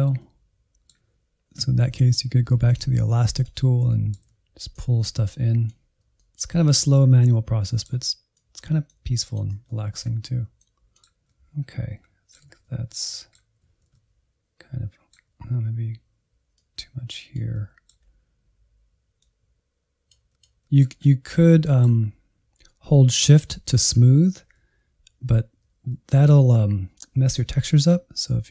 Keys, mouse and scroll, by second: 0.2-2.4 middle drag, 2.4-3.3 scroll down 1, 3.3 click, 3.9 shift+middle click, 4.8 click, 5.4 middle click, 5.7 alt+z, 5.8 shift+middle click, 6.4 click, 6.9 shift+middle click, 7.3 click, 7.5 alt+z, 7.6 middle click, 8.0 click, 8.5 shift+middle click, 8.8 click, 9.0 middle click, 9.3 click, 9.6 middle click, 10.0 click, 10.4 scroll down 2, 10.5-11.5 shift+middle drag, 11.5 alt+z, 11.6 middle click, 11.8 alt+z, 11.9 middle click, 12.7 click, 13.0 middle click, 13.2 scroll up 2, 13.5 click, 13.8 middle click, 14.3 click, 15.0 middle click, 15.2 click, 15.4 shift+middle click, 15.9 scroll up 2, 16.1 click, 16.2 shift+middle click, 16.6 click, 16.9 shift+middle click, 17.3 click, 17.8 f, 18.1 middle click, 18.5 click, 18.8 scroll down 2, 19.0-20.0 middle drag, 20.0 f, 20.2 alt+z, 20.4 middle click, 21.0-21.4 scroll up 2, 21.4 shift+middle click, 22.0-25.0 scroll up 1, 25.8-28.3 middle drag, 28.3 shift+click.